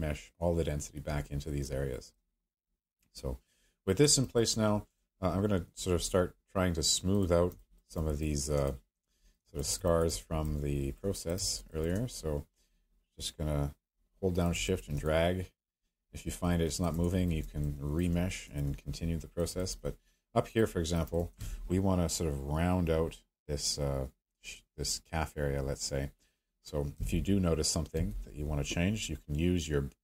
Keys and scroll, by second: 26.9 b, 27.9 m.